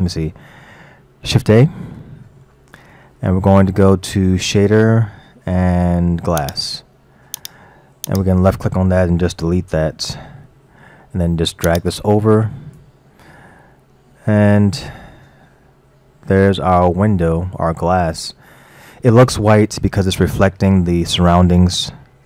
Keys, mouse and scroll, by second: 1.4 shift+a, 8.1 click, 10.4 Delete, 11.7 drag, 13.6 middle click, 13.6-14.3 scroll up 4, 14.3-17.4 middle drag, 18.0-19.4 middle drag, 19.4-20.1 scroll down 2, 20.1-20.9 middle drag, 20.9 scroll down 1, 22.0 scroll up 1.